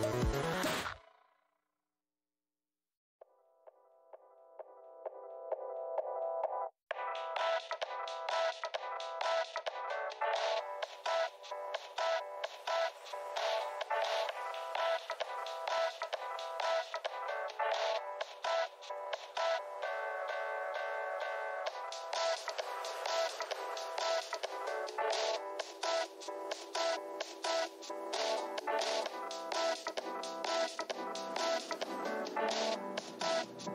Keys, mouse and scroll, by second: 0.1 alt+click, 0.3 alt+scroll up 1, 0.5-1.1 alt+scroll down 1, 1.3 alt+scroll, 1.8 space, 2.4 click, 3.3 space, 4.4 alt+`, 4.6 shift+v, 5.1 `, 6.1 shift+scroll down 2, 6.1 x, 6.2 scroll, 11.0 scroll down 1, 12.6 space, 13.1 click, 13.7 ctrl+shift+h, 13.9 scroll down 2, 15.0 alt+click, 16.4 Left, 17.8 click, 20.7 click, 21.3 w, 22.8 alt+click, 23.5 alt+scroll up 1, 24.8-25.7 alt+scroll, 27.9 alt+click, 31.2 alt+click.